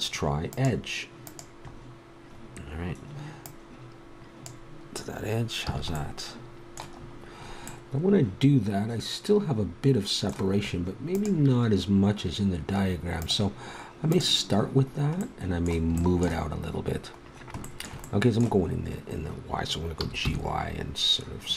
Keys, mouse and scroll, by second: 0.5-4.4 middle drag, 4.4 click, 5.6 a, 6.1 middle click, 14.1-15.8 drag, 15.8 middle click, 20.0 g.